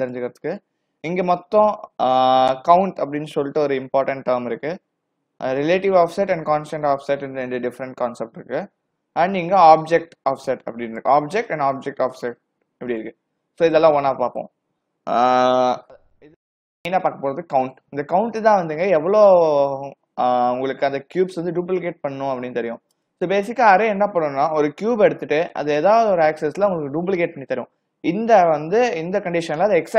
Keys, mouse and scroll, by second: 9.7 click, 12.2 click, 23.0 click.